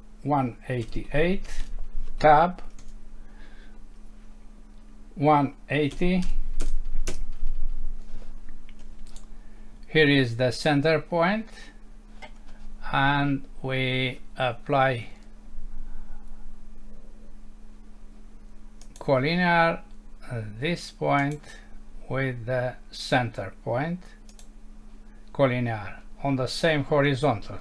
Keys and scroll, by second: 2.8 Tab, 7.1 Return, 8.8 Escape.